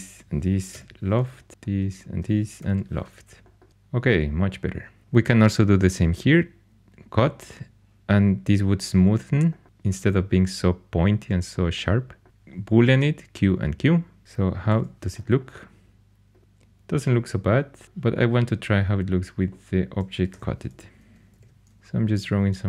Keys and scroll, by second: 0.6 l, 2.5 l, 12.2 typing, 14.0-14.7 typing, 20.2 4, 21.3 shift+h, 21.8 shift+a.